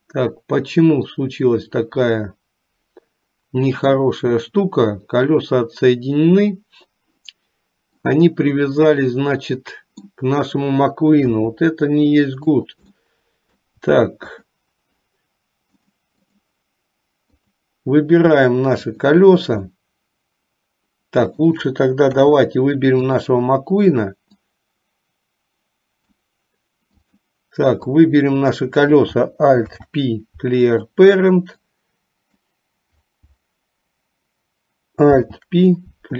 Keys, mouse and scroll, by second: 8.0 click, 9.0-10.2 middle drag, 11.4 KP_3, 13.1 middle click, 15.9 click, 19.8-21.6 middle drag, 22.1 KP_3, 23.3 click, 24.5-26.3 drag, 28.0 click, 29.6 alt+p, 31.9 click, 35.2 alt+p.